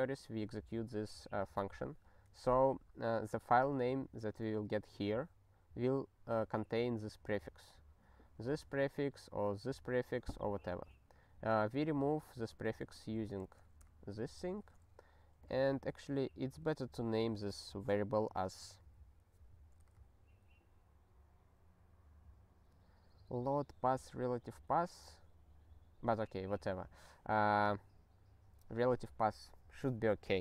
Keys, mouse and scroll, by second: 4.4 click, 11.5 click, 12.2 ctrl+b, 12.4 ctrl+b, 12.7 ctrl+b, 12.8 ctrl+b, 13.4 ctrl+alt+@, 14.5 ctrl+g, 15.4 click.